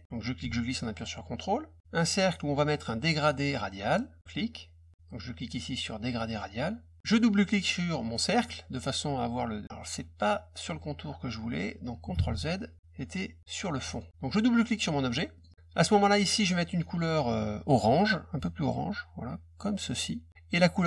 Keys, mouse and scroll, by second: 0.1-1.8 drag, 4.2 click, 6.2 click, 8.3 click, 8.4 click, 12.1 ctrl+z, 13.8 click, 15.3 click, 15.4 click, 19.9 click.